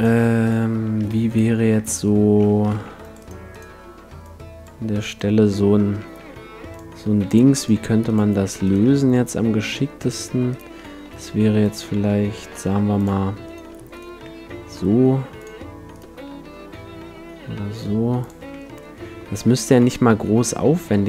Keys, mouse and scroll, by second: 1.1 g, 2.7 ctrl+r, 4.2-6.0 drag, 6.2 g, 6.7-8.7 drag, 7.4 ctrl+r, 8.1-10.5 right drag, 9.1 g, 10.1 click, 10.7 click, 10.7 right click, 10.9 click, 10.9 right click, 11.1 g, 12.5-13.5 drag, 12.5 g, 14.3 g, 14.8-15.9 right drag, 15.4-17.4 drag, 15.9-17.9 right drag, 16.5 g, 18.3-20.0 drag, 18.4 a, 18.7-20.7 middle drag, 19.3 a, 20.2 e.